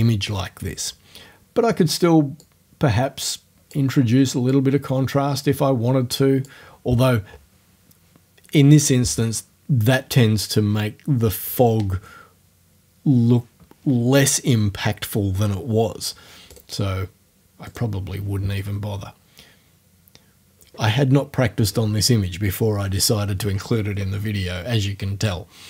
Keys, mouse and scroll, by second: 2.4-3.9 drag, 4.5-6.6 drag, 16.6 right click, 17.7 right click.